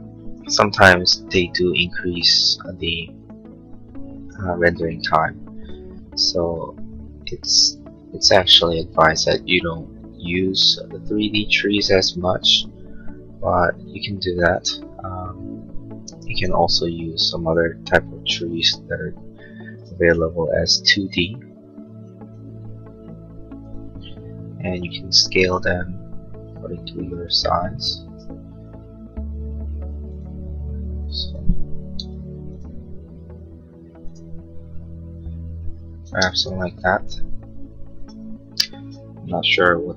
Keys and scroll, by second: 24.6 s, 32.1 m, 36.1 space.